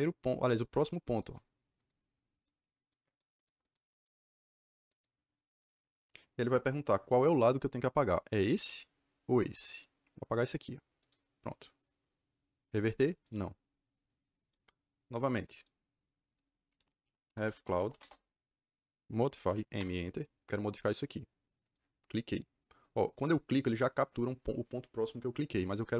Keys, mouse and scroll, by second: 1.1 click, 1.7 click, 2.7 click, 3.0 click, 3.3 click, 3.5 click, 3.8 click, 4.8 click, 10.9 click, 13.2 click, 16.3-18.3 typing, 19.4 m, 19.7 Return, 21.6 click.